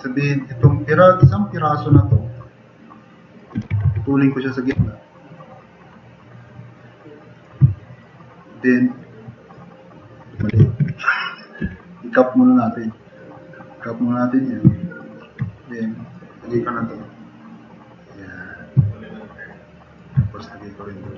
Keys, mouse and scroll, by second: 2.0 alt+q, 3.6 2, 4.8 f, 7.8 click, 9.0-9.4 drag, 10.7 ctrl+z, 11.6 e, 14.7 click, 18.2 click, 19.5-19.8 drag.